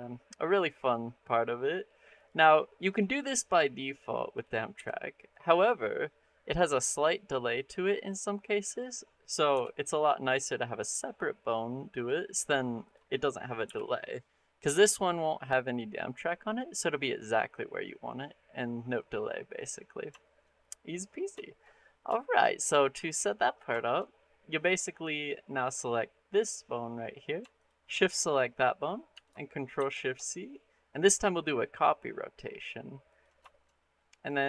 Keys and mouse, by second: 2.0 click, 2.7 click, 3.1 shift+click, 4.6 r, 7.9 click, 8.4 click, 8.8 middle click, 9.3 r, 11.8-12.3 drag, 13.0 middle click, 13.5 r, 19.4 click, 20.1 shift+middle drag, 20.5 middle drag, 21.3 shift+middle click, 21.7 middle click, 22.0-22.3 shift+middle drag, 22.4 middle click, 22.9 middle click, 23.6 shift+middle click, 24.1 middle drag, 25.3 click, 29.6 ctrl+shift+c, 33.3 shift+drag, 33.7 click.